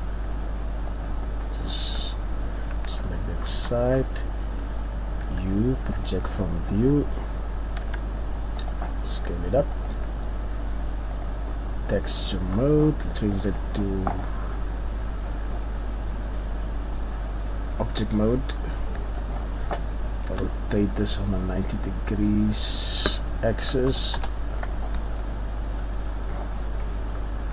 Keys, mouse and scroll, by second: 0.8 right click, 2.0 KP_3, 3.0-3.4 ctrl+scroll up 1, 4.0-6.0 scroll down 1, 6.0 u, 12.0 middle click, 12.4 scroll up 1, 12.9 Tab, 12.9 click, 13.4 click, 14.3 middle click, 14.6-15.1 scroll down 1, 15.1 scroll up 1, 15.6 middle click, 16.6-17.1 scroll down 2, 17.1 middle click, 17.9-18.4 scroll up 1, 18.6-19.4 scroll up 2, 19.0 Tab, 20.3 r, 25.7-27.1 scroll down 5, 26.6 middle click, 27.1-27.5 scroll up 2.